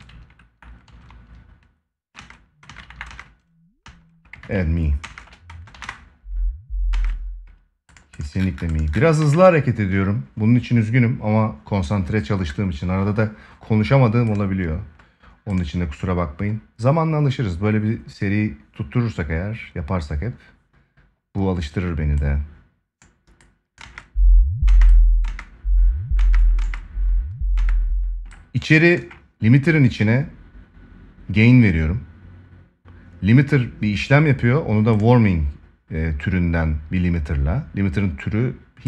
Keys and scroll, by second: 1.9 space, 3.6 space, 8.9 ctrl+s, 23.5 space.